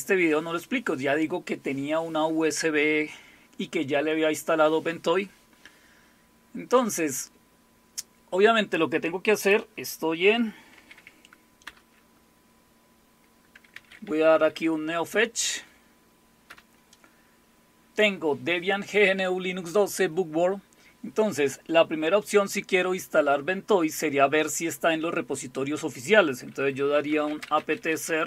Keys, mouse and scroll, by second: 9.4 click, 10.8 super+w, 11.7 super+Return, 13.5-14.8 typing, 16.4 Return, 26.7-28.2 typing.